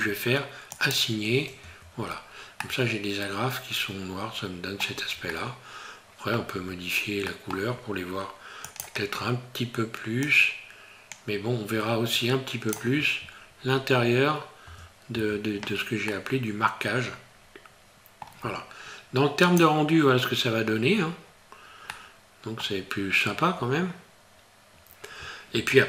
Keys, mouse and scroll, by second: 0.7 click, 1.6 Tab, 2.0-2.4 scroll down 4, 2.7 middle click, 4.9 scroll down 2, 5.3 middle click, 6.6 scroll up 2, 7.3 middle click, 8.6 click, 15.5 scroll down 3, 16.1 middle click, 19.6 click, 21.9 middle click.